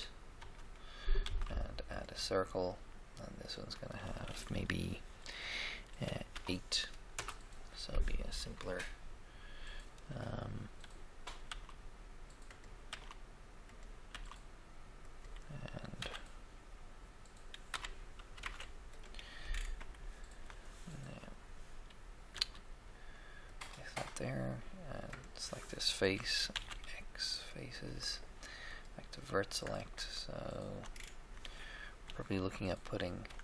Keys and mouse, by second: 0.3 3, 0.4 KP_3, 1.2 shift+a, 1.2 shift+a, 3.5 click, 6.3 8, 7.1 Return, 11.4 s, 11.6 s, 12.8 s, 13.0 s, 14.2 s, 15.9 r, 16.3 r, 17.7 y, 18.4 0, 19.5 middle click, 19.9 shift+click, 20.0 shift+middle click, 22.3 g, 22.5 g, 25.1-26.7 right drag, 26.5 x, 26.7 x, 28.7 click, 30.6 right click, 33.2 ctrl+r.